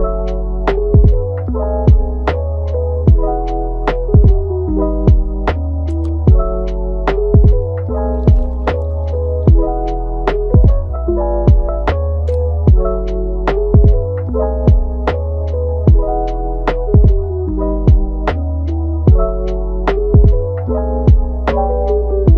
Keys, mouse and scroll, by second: 4.4-6.2 middle drag, 6.2 KP_1, 7.3-16.6 drag, 16.6 scroll down 2, 16.7 middle click, 17.3 scroll down 1, 17.5 middle click, 18.0 scroll up 1, 18.2 middle click, 19.2-19.7 scroll up 2, 19.7-20.0 scroll down 1, 20.0 middle click, 20.9-21.3 scroll up 1, 21.3 middle click, 22.1 scroll up 1, 22.2 middle click.